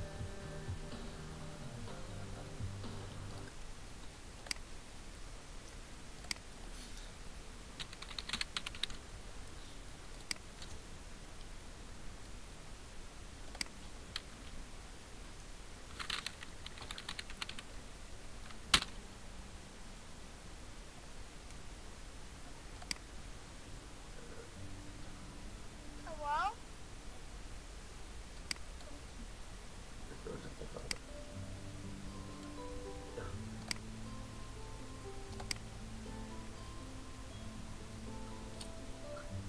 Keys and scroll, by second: 7.8-8.8 typing, 14.6 BackSpace, 16.6-17.6 typing, 18.7 Return.